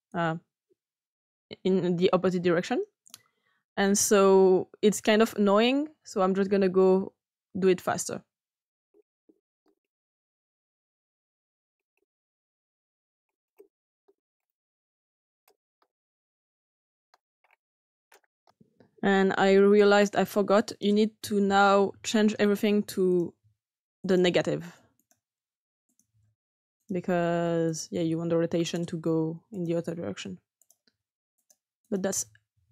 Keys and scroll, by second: 9.1-11.2 typing, 9.6 Return, 13.8 *, 14.0 Return, 15.6 typing, 15.8 Return, 17.0 typing, 17.1 Return, 18.3 typing, 18.4 Return, 21.8 6, 24.2 6, 26.0 6.